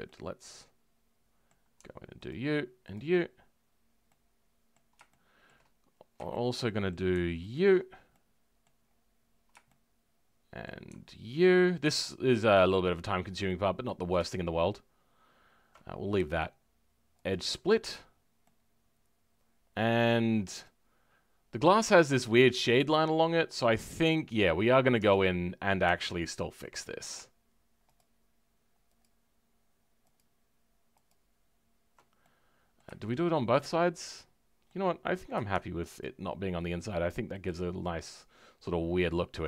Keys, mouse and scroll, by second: 0.0-2.2 shift+middle drag, 2.2 alt+shift+click, 2.9 alt+shift+click, 3.2-4.0 scroll down 1, 4.0-5.7 middle drag, 5.7-6.3 scroll up 1, 6.3-7.5 shift+middle drag, 7.5 alt+shift+click, 7.7-8.1 scroll down 4, 8.1 middle click, 8.8-9.6 scroll up 6, 9.6-11.5 shift+middle drag, 11.5 alt+shift+click, 12.3-13.4 scroll down 1, 13.4-17.3 middle drag, 17.3 right click, 18.1-18.4 scroll down 2, 18.4-20.2 middle drag, 20.2-20.6 scroll down 3, 20.6-23.9 middle drag, 23.9-24.4 scroll up 6, 24.4 middle click, 24.9 Tab, 26.7 alt+click, 29.0 alt+shift+click, 32.2-34.9 middle drag, 34.9-35.3 scroll up 1, 36.0 alt+shift+click, 37.4 alt+shift+click.